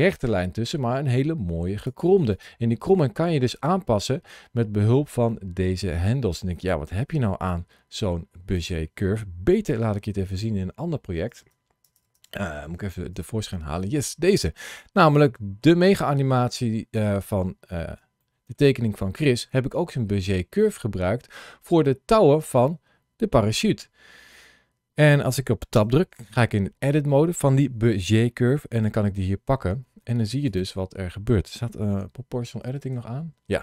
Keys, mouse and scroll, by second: 0.7 g, 1.6 click, 2.2 click, 2.7 g, 8.4 click.